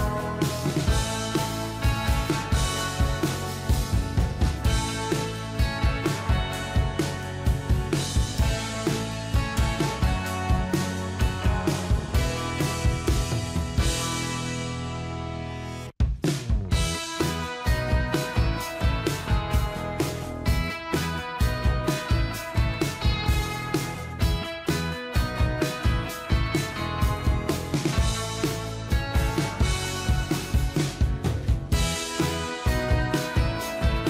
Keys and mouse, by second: 1.1 ctrl+g, 4.3 Left, 4.4 Left, 4.7 Left, 5.3 Right, 10.7 click, 12.6-15.4 typing, 16.7 double click, 17.4-18.2 ], 21.3-22.1 ], 22.3 ].